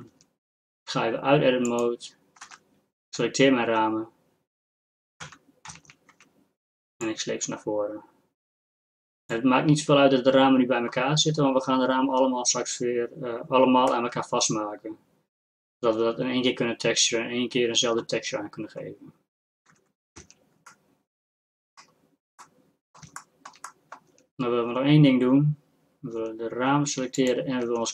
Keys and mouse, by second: 0.1 Tab, 1.7 click, 2.5 z, 3.4 z, 5.3 Tab, 5.9 a, 6.0 a, 6.4 a, 7.1-9.4 drag, 20.2 Tab, 24.2 Tab, 26.4 Tab, 27.8 z.